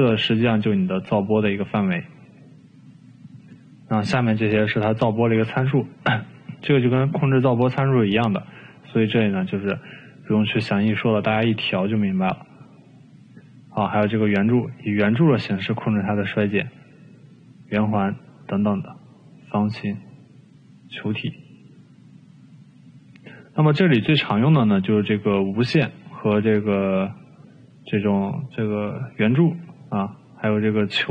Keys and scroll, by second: 8.3 ctrl+z.